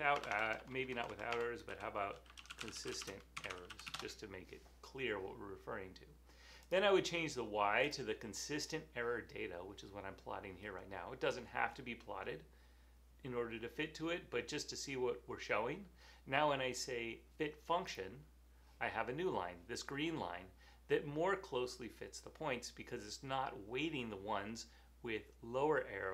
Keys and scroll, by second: 0.0-4.4 typing, 6.8-7.5 typing.